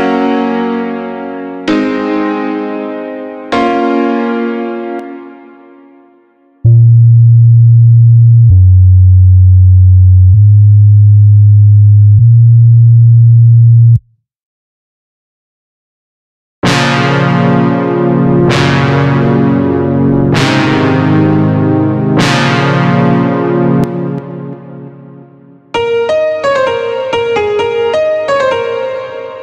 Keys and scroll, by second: 4.4 space, 6.0 space, 13.3 space, 16.0 space, 23.2 space, 25.1 space.